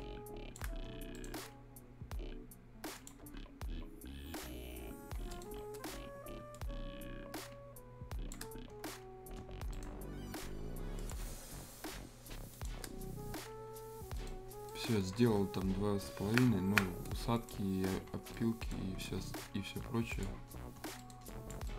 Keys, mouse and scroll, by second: 0.9 scroll down 1, 1.1 right click, 1.7-2.9 scroll up 1, 2.9 click, 3.1 click, 5.3 click, 5.5 scroll down 1, 5.7 scroll up 1, 6.5-8.4 shift+drag, 8.4 shift+scroll down 1, 9.4 scroll down 1, 9.7 right click, 9.9 scroll up 1, 10.0-11.0 scroll, 11.0 click, 11.2 scroll down 1, 12.5 shift+click, 12.8 scroll down 2, 13.3-13.6 scroll up 1, 14.1 right click, 14.5 scroll down 1, 14.7 right click, 15.9 scroll down 1, 16.3 Escape, 16.4-16.8 scroll up 1, 17.3 click, 17.6 scroll down 1, 17.8 scroll up 1, 18.2 scroll down 1, 18.3 right click, 18.7 scroll down 1, 20.1 click, 20.5 scroll down 1, 21.0 right click, 21.3 click, 21.6 right click.